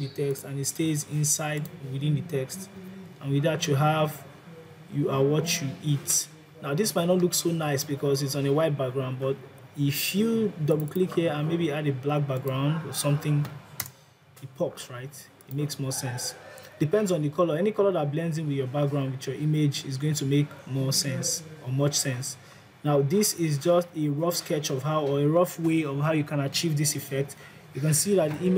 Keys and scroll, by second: 2.6 Delete.